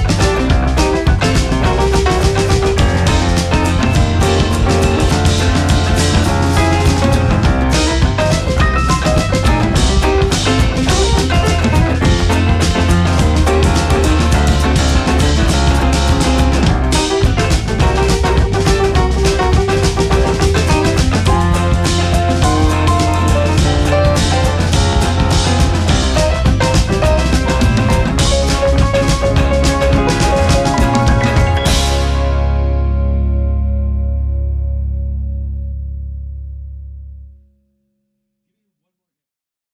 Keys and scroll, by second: 15.0 Right, 15.4 Down, 15.5 Right, 15.6 Down, 15.7 Right, 15.8 Up, 16.9 Left, 16.9 Up, 19.2 ctrl+c, 26.0 Down, 26.3 Right, 26.5 Up, 32.7 space.